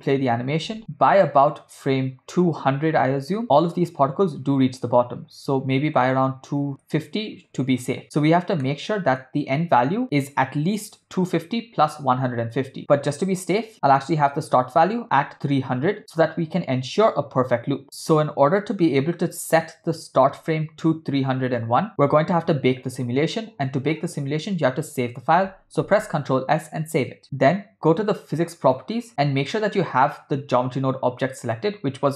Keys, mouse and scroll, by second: 0.2 space, 7.7 space, 8.7 middle click, 21.6-23.7 drag, 28.6 click.